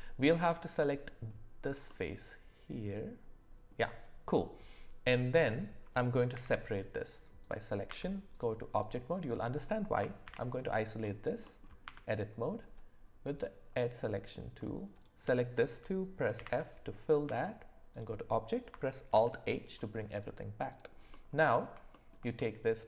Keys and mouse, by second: 0.8-1.3 middle drag, 1.9-3.7 middle drag, 7.9 Tab, 9.2 click, 10.2 shift+h, 11.4 middle click, 11.8 Tab, 13.4 click, 14.2 click, 17.2 Tab, 19.1 alt+h, 20.7 click, 21.1 middle click, 21.9 shift+middle drag, 22.4 middle click.